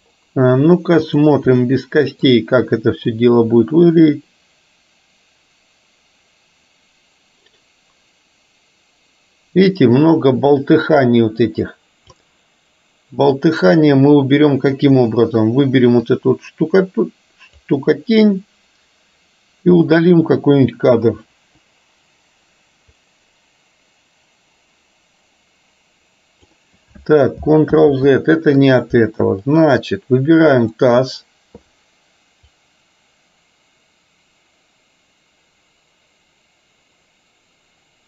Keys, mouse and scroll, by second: 1.1 drag, 1.7 middle click, 3.2-12.2 drag, 13.4 click, 13.9-14.7 middle drag, 16.2-17.7 drag, 19.7-20.4 drag, 21.4 Delete, 23.1-26.7 drag, 27.9 ctrl+z, 29.6 middle click, 30.7 click, 32.7-38.0 drag.